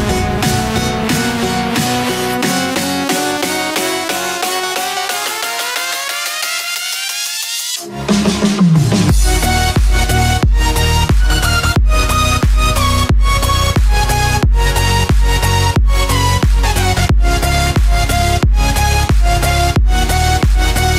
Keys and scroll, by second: 8.7 ctrl+-, 9.5 ctrl+=.